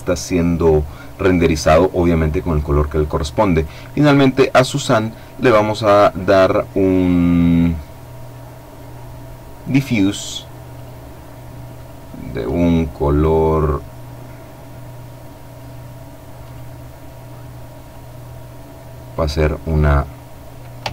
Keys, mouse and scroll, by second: 3.2 right click, 4.3 click, 5.4 click, 9.3 click, 10.3 click, 11.3-12.5 drag, 13.2-15.6 drag, 16.0 click, 17.5 click, 20.8 ctrl+c.